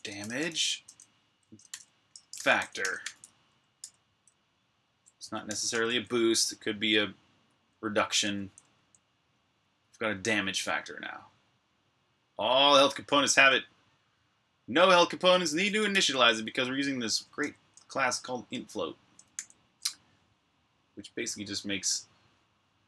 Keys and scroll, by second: 0.0-3.6 typing, 4.9-5.8 typing, 7.3-8.5 typing, 12.8 typing, 14.9-15.7 typing, 17.2 Escape, 19.1 j.